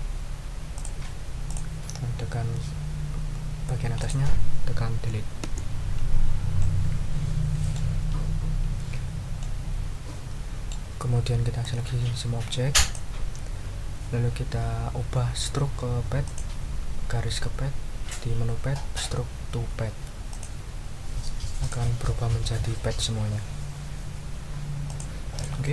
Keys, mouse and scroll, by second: 0.7 click, 1.5 click, 4.0 click, 5.4 Delete, 6.6-7.9 drag, 9.4-10.9 drag, 11.6-13.1 drag, 16.2 click, 20.3 click, 21.6 click, 24.9 click, 25.3 click.